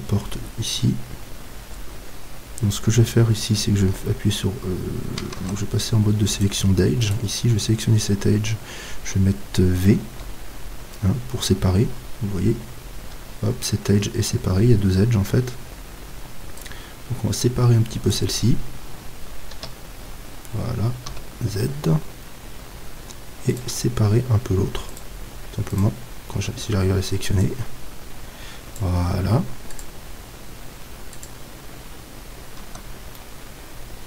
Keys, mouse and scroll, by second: 5.3 ctrl+Tab, 7.1-8.9 right drag, 10.1 v, 16.6-18.4 drag, 19.5 KP_3, 21.1 z, 22.8-24.6 middle drag, 23.5-27.7 right drag, 27.4-29.9 drag, 32.6 Tab.